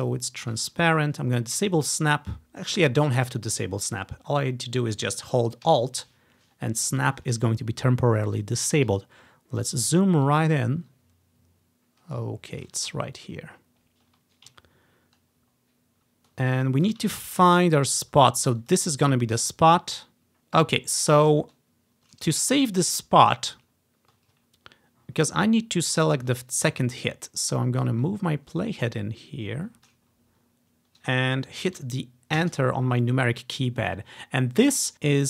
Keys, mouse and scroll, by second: 1.0-3.1 ctrl+drag, 3.1 click, 4.1-8.8 drag, 9.2-9.9 scroll up 3, 10.4-12.8 drag, 12.9-14.3 ctrl+drag, 13.1-13.7 scroll down 3, 14.3-14.7 scroll down 1, 14.7-15.7 ctrl+scroll up 2, 16.2 scroll up 1, 17.2-18.7 ctrl+scroll up 2, 18.9-20.4 ctrl+drag, 20.4 ctrl+`, 20.4 ctrl+scroll up 4, 21.0-21.3 ctrl+scroll down 2, 21.6 ctrl+scroll up 2, 22.9 scroll down 1, 23.8 scroll up 1, 24.5 scroll down 1, 25.0 scroll up 3, 25.4 scroll down 1, 25.8 scroll up 4, 28.1-30.0 drag, 30.2 scroll up 2, 31.3 ctrl+click, 32.5 Return.